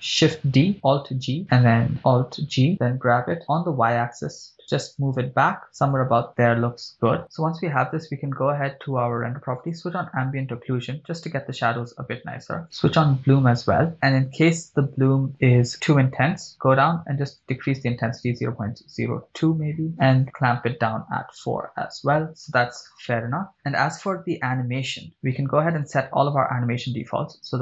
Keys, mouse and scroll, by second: 0.5 shift+d, 1.4 alt+g, 2.1 right click, 2.7 alt+g, 3.4 g, 4.6 y, 6.3 click, 8.3 click, 10.0 click, 12.9 click, 16.5 click, 17.3-19.8 drag, 20.6-22.3 drag, 25.8 click, 27.0-27.6 drag.